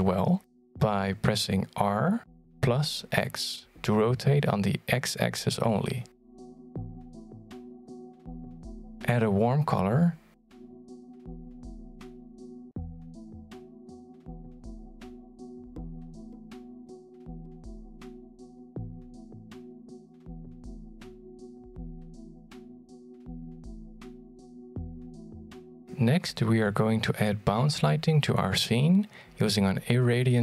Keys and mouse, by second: 2.0 r, 4.8-5.4 middle drag, 5.6 r, 8.4-8.9 middle drag, 8.9 r, 18.2 middle click, 18.6 r, 22.6-23.8 middle drag, 24.6 g, 25.5 r, 28.0 middle drag, 29.4 g.